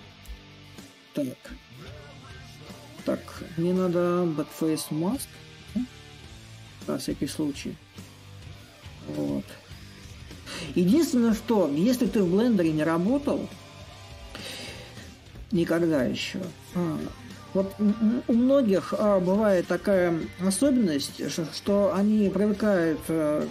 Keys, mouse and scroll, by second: 6.7-11.8 drag, 12.8-17.9 drag, 18.7 click, 19.0 click, 19.5 click, 20.0 a, 21.4-23.5 drag.